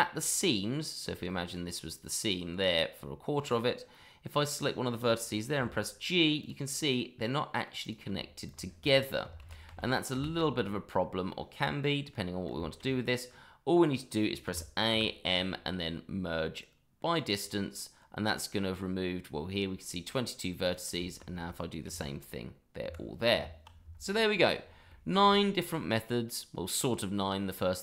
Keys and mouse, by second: 0.3-0.8 middle drag, 1.2 middle drag, 3.9 middle click, 4.5 click, 5.5 g, 6.4 click, 6.6-7.6 middle drag, 7.8 click, 8.4 click, 8.8 middle drag, 9.4 ctrl+z, 11.3-12.1 middle drag, 12.5 shift+middle drag, 14.4 a, 14.9 m, 20.6 click, 20.9 shift+middle click, 21.9 g, 22.8 Escape, 23.3 Tab, 24.9 shift+middle drag.